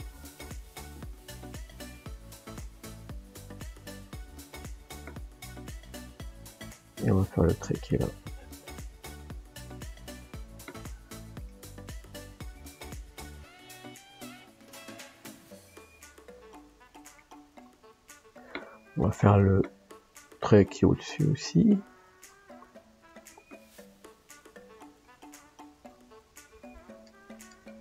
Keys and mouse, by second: 5.2-8.4 middle drag, 8.4-11.5 drag, 11.5-13.4 middle drag, 13.4-17.2 drag, 17.2 middle click, 18.4 middle click, 20.9-27.8 middle drag.